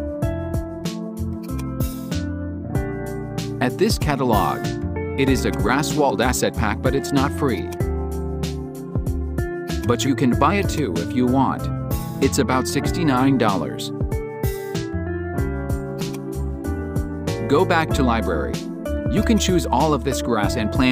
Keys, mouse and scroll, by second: 1.4 click.